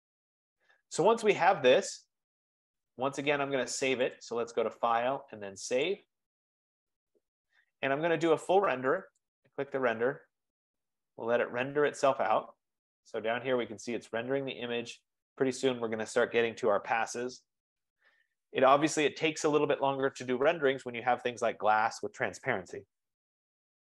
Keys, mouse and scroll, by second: 0.5-1.4 scroll up 4, 4.2 click, 5.5-5.8 scroll, 6.1 click, 9.3 click, 12.2-14.4 drag.